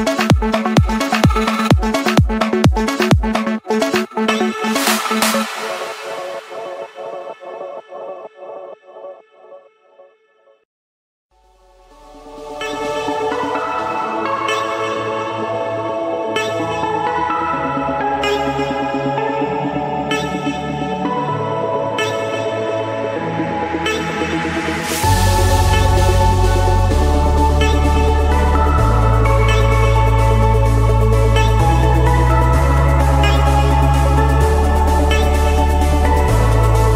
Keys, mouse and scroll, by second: 0.1 Return, 0.8 scroll, 1.5 scroll, 1.9 click, 2.9 click, 3.8 Return, 5.2-6.3 drag, 6.2 Escape, 8.0-9.1 drag, 9.3-10.5 drag, 10.6 click, 11.8-12.3 scroll down 4, 12.3-13.9 scroll up 9, 13.9-14.2 scroll up 1, 14.4 click, 14.8-15.1 scroll, 16.0 click, 17.9-18.9 scroll, 19.6-20.9 scroll, 22.0 click, 23.6 click, 24.0-24.7 scroll, 25.4 Escape, 26.4 click, 28.3-29.3 scroll, 29.9 click, 31.4-32.5 scroll, 33.9-34.9 typing, 35.3 Return.